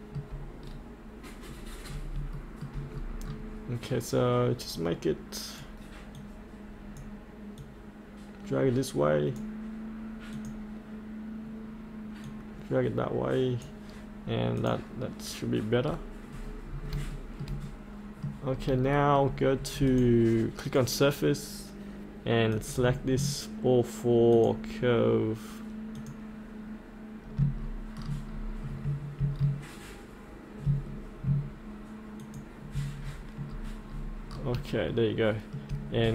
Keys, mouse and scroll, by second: 0.6-0.9 scroll down 1, 2.3 shift+middle click, 2.9 scroll down 1, 4.7-14.6 drag, 15.8-16.9 scroll up 1, 17.1 shift+middle click, 18.6 scroll down 1, 18.9 shift+middle click, 19.9 click, 24.3 ctrl+click, 26.0 ctrl+click, 27.5 scroll down 1, 28.4-28.8 scroll down 1, 29.4 scroll down 1, 30.9-31.2 scroll up 1, 32.2 ctrl+click, 33.1-34.2 scroll up 1, 34.9 shift+middle click.